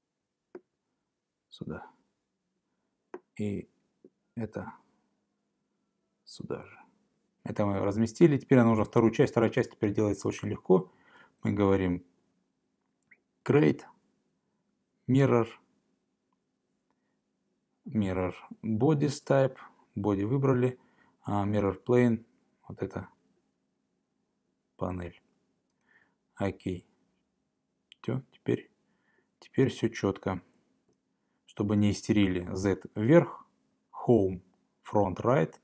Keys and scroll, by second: 11.5 Escape.